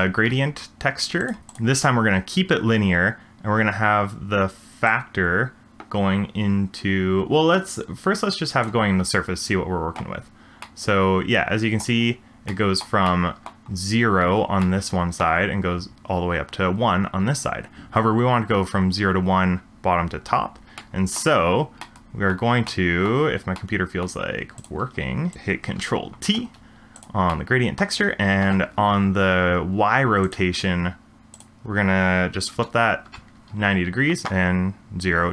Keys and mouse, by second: 5.1-8.6 drag, 10.6-11.8 middle drag, 12.6 middle click, 13.1-13.5 shift+middle drag, 14.6-15.2 middle drag, 23.0 middle drag, 23.6 middle click, 24.6 click, 24.8 g, 25.8 ctrl+t, 26.9 click, 27.4 middle click, 31.4-33.0 drag.